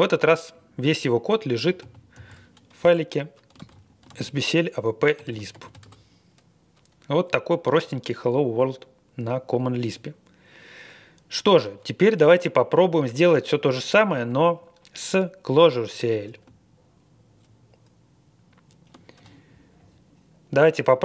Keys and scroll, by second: 1.8 super+c, 2.1 super+v, 2.8 Return, 3.5 ctrl+a, 4.1 ctrl+a, 4.9-6.0 typing.